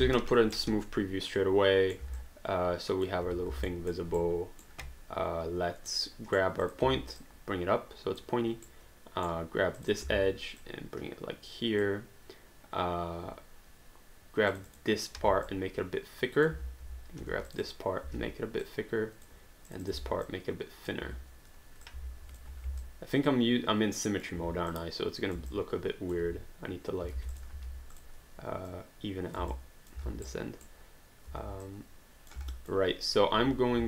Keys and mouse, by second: 0.0 3, 0.6 right click, 2.2 alt+click, 3.7 alt+middle click, 4.2 right click, 5.9 right click, 6.6 click, 6.8 w, 7.2 click, 8.7 right click, 9.8 click, 10.0 w, 10.6 click, 14.5 click, 15.2 r, 15.5 click, 17.2 q, 17.5 click, 18.1 r, 18.6 click, 20.0 r, 20.3 click, 21.0 w, 21.9 click, 22.0 alt+click, 22.2 click, 22.4 ctrl+click, 22.5 ctrl+z, 22.8 alt+click, 24.7 click, 25.5 alt+click, 27.2 alt+d, 27.3 click, 27.5 r, 27.9 click, 29.8 alt+click, 30.3 right click, 31.6 click, 32.5 alt+click.